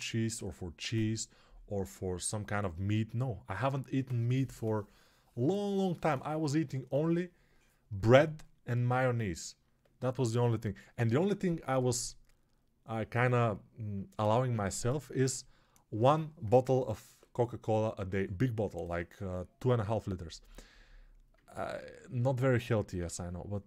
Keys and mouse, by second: 22.7 alt+q.